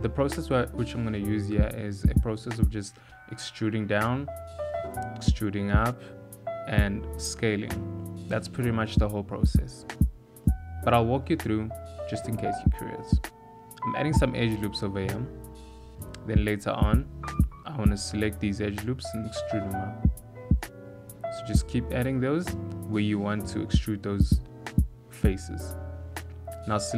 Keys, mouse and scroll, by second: 0.2 click, 1.0 click, 1.7 click, 2.9 g, 4.8 click, 5.5 g, 8.2 shift+middle click, 10.1 shift+middle click, 10.7 ctrl+r, 12.2 ctrl+r, 14.7 shift+middle click, 15.4 ctrl+r, 18.3 ctrl+r, 21.1 ctrl+r, 22.6 ctrl+r, 24.1 3.